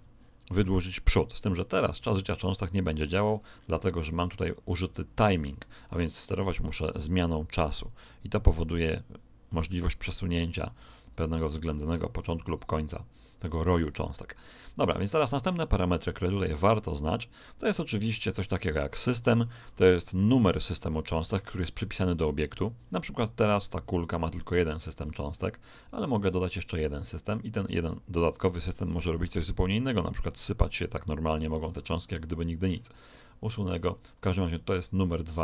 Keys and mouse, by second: 3.2-5.4 middle drag, 6.7 click, 14.4-16.6 middle drag, 17.4-19.3 middle drag, 24.4-26.9 middle drag, 26.7 click, 29.1 alt+a, 31.4 Escape.